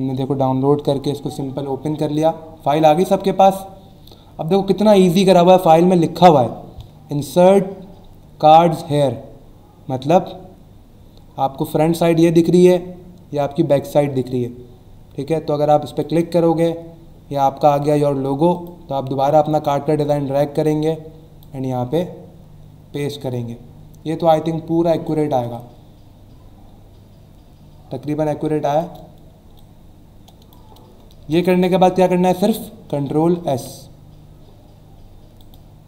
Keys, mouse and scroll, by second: 2.1 click, 2.8 click, 15.9 click, 18.5 click, 19.4 click, 23.0 click, 29.6 click, 31.3 Return, 33.5 ctrl+s, 35.4 click.